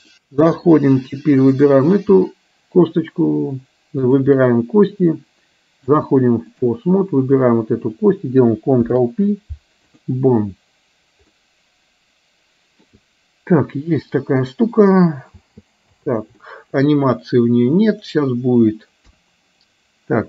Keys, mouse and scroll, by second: 0.1 click, 1.4 click, 5.9 click, 7.3 click, 8.9 ctrl+p, 11.6-12.9 middle drag, 15.4 space, 16.4 middle click, 16.4 space, 18.1 drag, 19.4 KP_1.